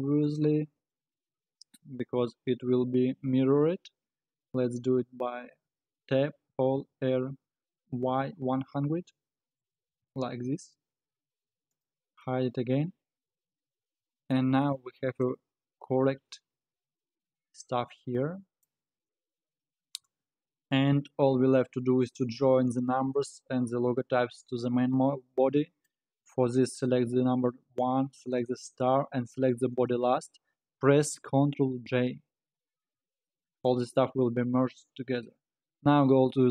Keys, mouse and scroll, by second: 0.2 click, 1.1-1.4 scroll up 1, 1.4 scroll down 1, 2.2 KP_1, 3.0-5.8 scroll down 3, 5.8 Tab, 6.5 a, 6.9 r, 10.4 Tab, 11.7 click, 12.3-20.4 middle drag, 20.4-21.8 scroll up 5, 21.8-22.5 scroll down 4, 22.7 click, 23.2-28.5 middle drag, 28.5 shift+click, 29.7 shift+click, 32.2 ctrl+j, 33.3-34.0 middle drag, 34.0-34.5 scroll up 5, 34.5 scroll down 2, 34.8-35.2 scroll up 4, 35.2-36.5 scroll down 1.